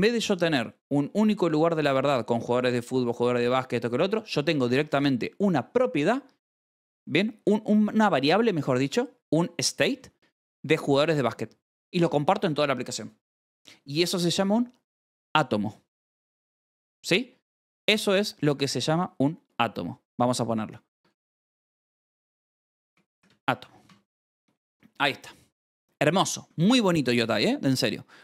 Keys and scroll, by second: 9.1 0, 9.9 e, 17.2 l, 20.1-24.0 typing, 20.3 Escape, 25.2-26.8 typing, 26.4 Escape.